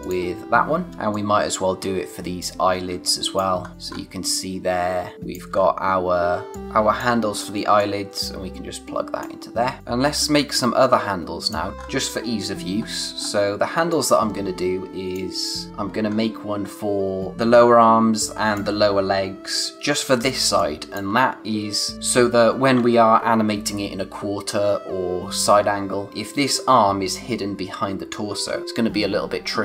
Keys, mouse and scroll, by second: 0.0 click, 0.9 o, 0.9 space, 1.1 click, 1.5 space, 3.1 click, 3.6-4.4 scroll up 2, 3.7 space, 5.1 click, 5.4 space, 5.6-5.9 scroll up 1, 6.5 click, 6.8 space, 7.8 click, 11.7 scroll down 1, 11.8-13.2 scroll up 1, 13.2-13.7 scroll down 1, 13.7 space, 13.9 click, 14.2 space, 16.0 scroll up 1, 18.3 click, 18.6 space, 19.5 scroll down 1, 19.7 space, 20.6 click, 20.9 space, 26.1-27.9 scroll up 1.